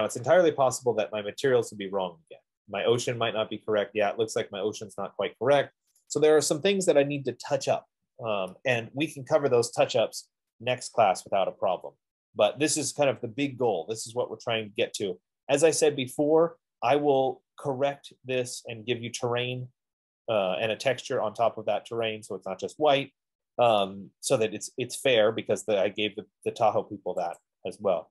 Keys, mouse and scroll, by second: 0.6-4.6 drag, 27.9-28.1 drag.